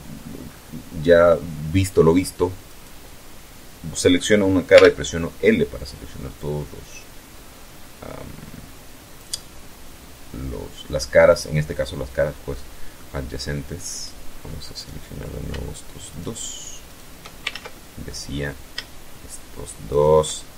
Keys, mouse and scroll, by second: 0.8 middle click, 1.6 right click, 3.6 l, 5.3-10.1 drag, 8.3-10.1 right drag, 11.4-12.0 middle drag, 12.8 right click, 13.7 right click, 15.0 shift+right click, 15.8 shift+right click, 16.4 ctrl+shift+z, 16.6 ctrl+shift+middle click, 17.5-18.8 scroll up 1, 18.8 shift+right click, 19.3 shift+middle click, 19.7 shift+scroll up 1, 19.9 shift+scroll down 1, 20.2 middle click.